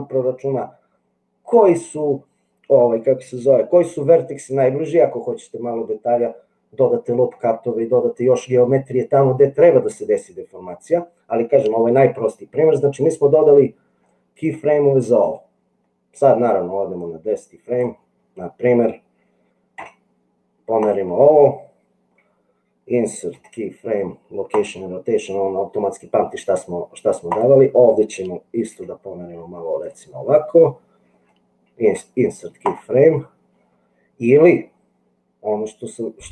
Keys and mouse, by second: 16.9 click, 19.8 g, 23.4 i, 27.2 click, 28.7 g, 32.0 i.